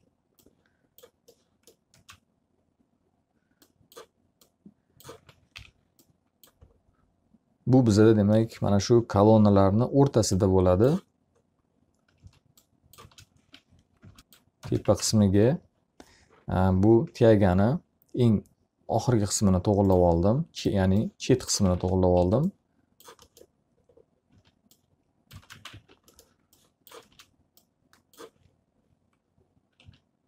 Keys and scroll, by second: 1.8 space, 5.5 F4, 11.7 s, 12.9 space, 13.9 F5, 14.5 s, 15.3 space, 15.6 z, 15.8 alt+a, 21.9 w, 22.4 space, 22.9 s, 26.1 space, 26.3 z, 26.4 alt+a, 27.7 w, 27.8 space.